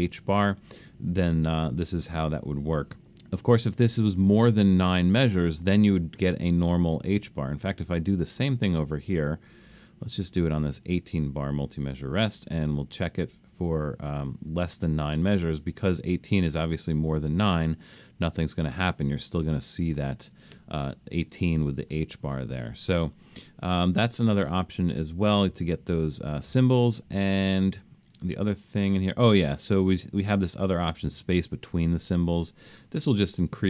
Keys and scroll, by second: 20.2 super+z, 24.4 super+z, 25.0 super+z.